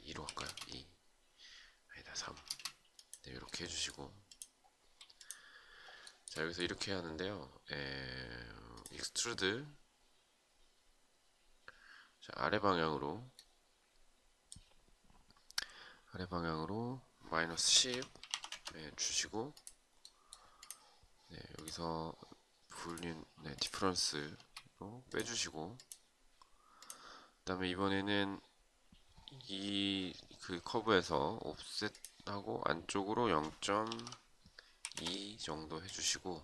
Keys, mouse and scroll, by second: 1.8 space, 5.6 shift+right click, 17.9 Return, 23.8 space, 34.4 Return.